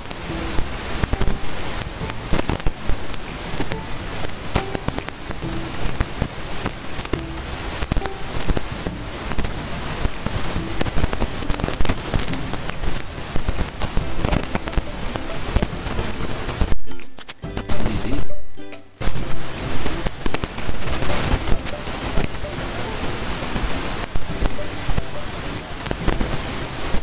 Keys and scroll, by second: 11.3 ctrl+z, 12.3 ctrl+a, 12.9 ctrl+[, 13.0 ctrl+[, 13.1 ctrl+[, 13.3 ctrl+[, 13.4 ctrl+[, 13.5 ctrl+[, 13.6 ctrl+[, 17.4 ctrl+a, 18.0 ctrl+[, 18.2 ctrl+[, 18.4 ctrl+[, 18.5 ctrl+[.